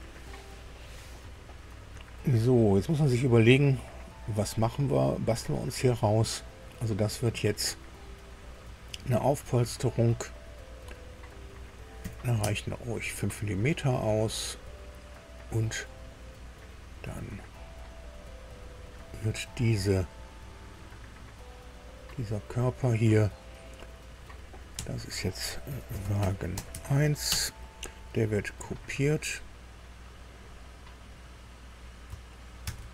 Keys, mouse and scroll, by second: 0.7-6.6 middle drag, 9.1 click, 11.9 KP_5, 12.3 Tab, 14.0-17.6 drag, 17.7 click, 19.6-20.8 drag, 21.5 scroll down 1, 22.5 click, 24.7 F2, 25.6-27.2 typing, 27.2 Return, 28.5 click, 29.1 click, 30.0 click, 31.5 click, 32.6 ctrl+c.